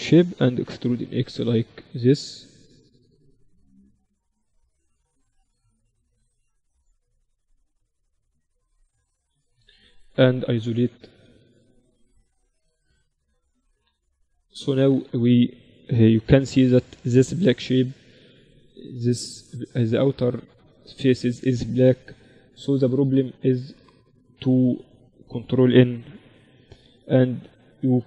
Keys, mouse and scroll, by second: 0.6 e, 10.0 z, 10.6-12.6 middle drag, 10.8 z, 11.2 a, 13.8-15.3 middle drag, 14.7 click, 14.7-16.7 right drag, 15.3 a, 15.6 a, 16.7 a, 17.8 middle click, 20.8 middle click, 21.3-23.4 right drag, 22.2-23.4 drag, 23.2 a, 23.4-26.2 middle drag, 23.4 a, 26.2 ctrl+n, 27.4 click, 27.4 right click, 27.4 a, 27.7 a.